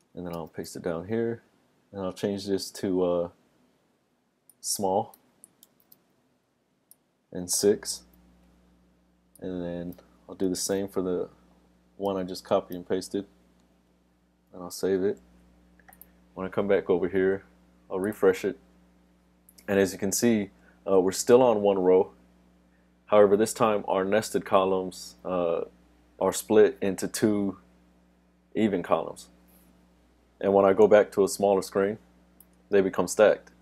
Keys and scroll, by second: 0.6 super+v, 14.8 super+s.